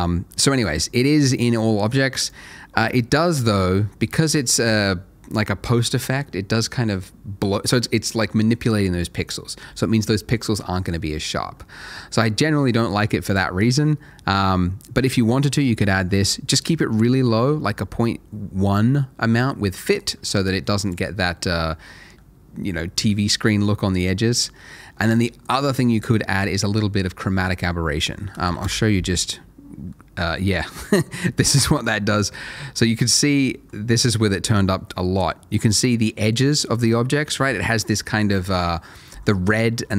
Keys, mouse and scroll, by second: 2.3 click, 11.6 middle click, 13.2 click, 15.9 middle click, 20.8 click, 24.3 click, 25.4 double click, 28.3 BackSpace, 28.4 1, 28.6 Return, 29.7 scroll down 1, 29.9 middle click, 30.2 scroll up 1, 30.8 middle click, 31.2 shift+middle click, 31.8 middle click, 32.4 shift+middle click, 33.2 scroll up 1, 33.7 middle click.